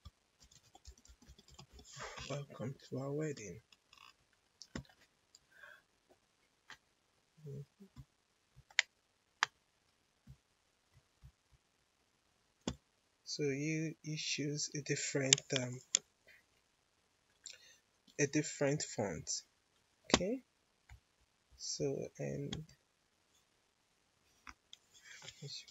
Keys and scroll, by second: 0.0-2.1 typing, 25.6 4.